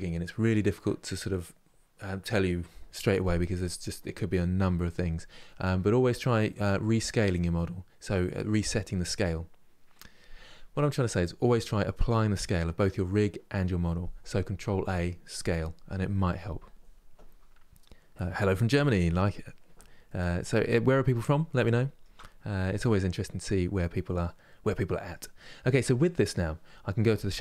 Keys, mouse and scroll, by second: 20.8-21.3 scroll down 1, 21.3-25.4 shift+middle drag, 25.4 click.